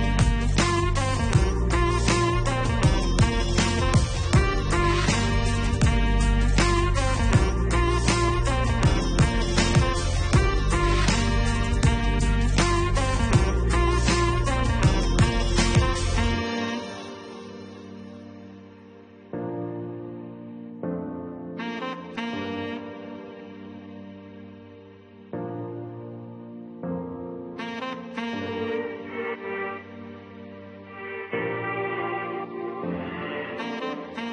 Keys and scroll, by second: 17.1 2, 17.5 7, 18.1 3, 21.1 -, 22.2 1, 22.5 0, 23.3 4, 28.2 -.